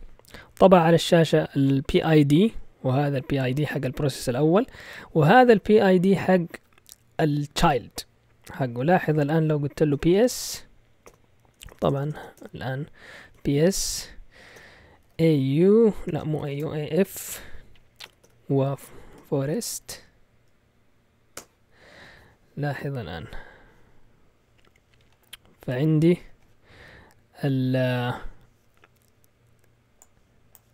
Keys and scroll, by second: 9.7-16.5 typing, 18.0-21.7 typing.